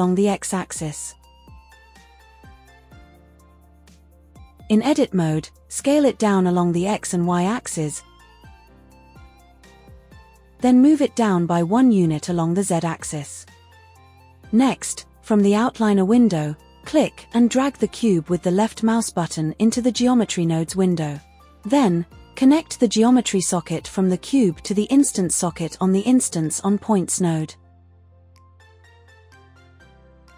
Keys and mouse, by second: 2.3 g, 2.9 x, 4.2 Tab, 5.4 s, 5.9 z, 7.1 s, 7.6 shift+z, 10.8 Tab, 11.7 Tab, 12.6 g, 12.9 z, 13.4 KP_Subtract, 13.8 KP_1, 14.1 KP_Enter, 14.3 Tab, 15.6 click, 17.4 click, 19.5-22.6 drag.